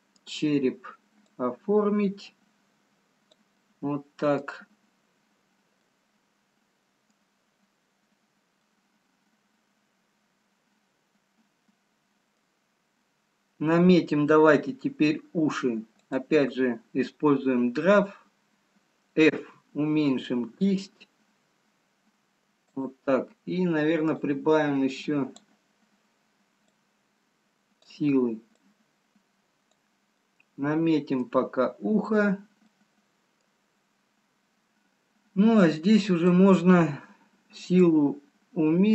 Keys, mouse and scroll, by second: 1.5 click, 3.6 middle click, 5.8 middle click, 5.8-6.5 scroll up 1, 8.7 middle click, 16.3 click, 24.4 click, 27.1 click, 30.8 click, 30.8 middle click, 32.8 middle click, 36.0 click, 37.9 click.